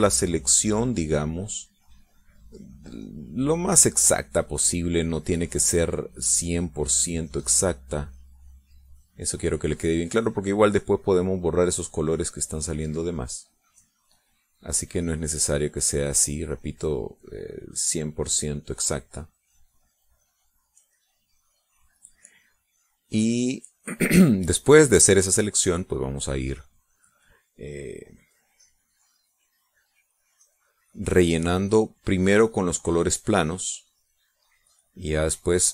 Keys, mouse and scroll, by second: 0.0 click, 0.6 click, 1.1 click, 1.7 click, 2.1 click, 2.6 click, 3.0 click, 3.4 click, 3.9 click, 4.5 click, 5.0 click, 5.4 click, 6.0 click, 6.6 click, 7.1 click, 7.6 click, 8.1 click, 9.3 click, 9.7 click, 10.2 click, 10.6 click, 11.0 click, 11.5 click, 11.9 click, 12.4 click, 12.8 click, 13.3 click, 13.7 click, 14.1 click, 14.5 click, 14.9 click, 15.3 click, 15.8 click, 16.3 click, 16.8 click, 17.2 click, 17.7 click, 18.2 click, 18.7 click, 19.1 click, 19.9 click, 20.4 click, 21.1 click, 21.7 click, 22.4 click, 23.2 click, 23.8 click, 24.3 click, 24.8 click, 25.3 click, 25.6 click, 26.1 click, 26.5 click, 26.9 click, 28.0 click, 28.6 click, 29.0 click, 29.4 click, 29.9 click, 30.3 click, 31.3 click, 31.6 click, 32.0 click, 32.5 click, 33.4 click, 33.9 click, 34.4 click, 35.0 click, 35.4 click.